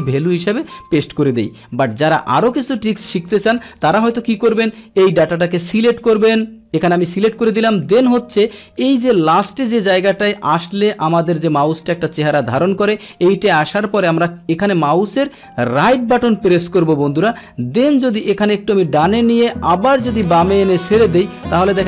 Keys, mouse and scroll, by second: 3.8 click, 5.0 click, 6.5 click, 15.9 right click, 16.8-21.4 right drag.